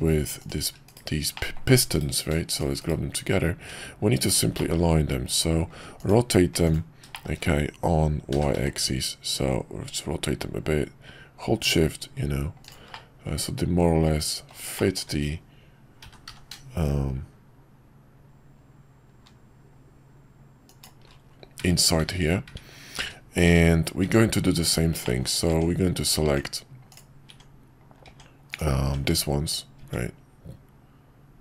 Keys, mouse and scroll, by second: 0.8 /, 1.3 middle drag, 3.6 /, 3.6 `, 4.5 middle click, 7.1 shift+middle click, 13.0-14.5 middle drag, 14.9 shift+middle click, 22.0 `, 25.1 middle click, 25.4-31.4 Tab.